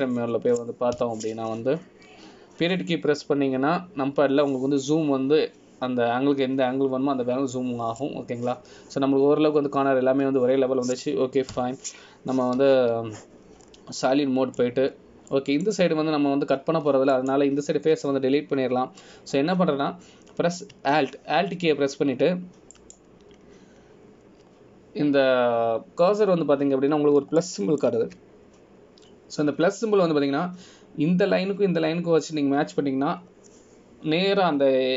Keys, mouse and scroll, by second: 1.3 KP_7, 1.9 z, 3.1 KP_Decimal, 4.0 scroll up 2, 13.7 KP_1, 14.8 z, 15.8-16.4 scroll down 3, 16.2 middle click, 17.1-17.7 scroll down 2, 17.5 middle click, 19.3 click, 24.9 alt+click, 28.6-29.1 scroll up 2, 29.6 shift+middle click, 30.3-31.8 shift+scroll up 3.